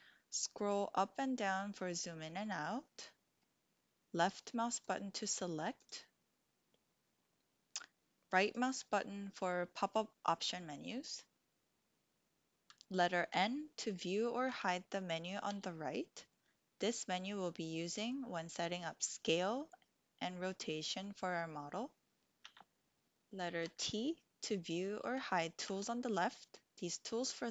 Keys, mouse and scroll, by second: 3.7-4.4 middle drag, 4.7 click, 5.7 click, 8.5-11.3 drag, 13.3 n, 14.5 n, 15.5 n, 22.4 n, 22.9 t, 23.6 t, 25.0 t, 25.6 t.